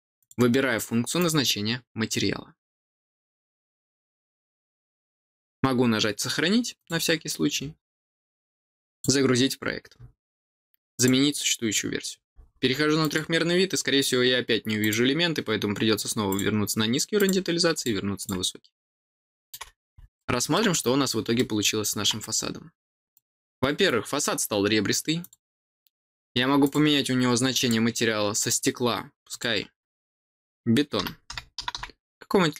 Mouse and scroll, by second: 0.1 click, 1.1 click, 6.7 click, 8.9 click, 10.9 click, 12.9 click, 14.7 click, 16.2 click, 17.1 click, 17.7 click, 18.1 click, 18.9 middle click, 20.1 middle click, 20.7-21.0 scroll down 4, 21.3 middle click, 23.1 click, 25.1 click, 26.6 click, 27.5 click, 29.2 click.